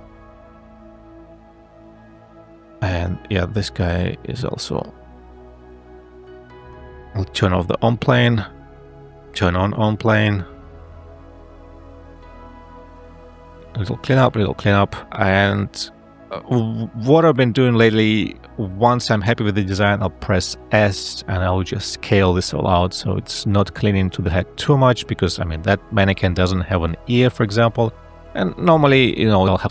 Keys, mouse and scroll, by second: 4.3 a, 6.7 `, 7.5 space, 20.5 s, 24.2 g, 25.4 f, 26.8 g.